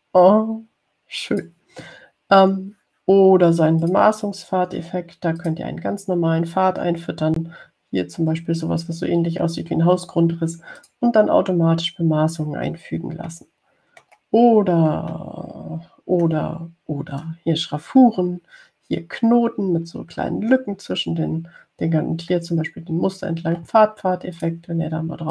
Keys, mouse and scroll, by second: 5.1 click, 6.6 click, 12.0 click, 14.5 middle click, 14.7 click, 16.3-17.6 drag.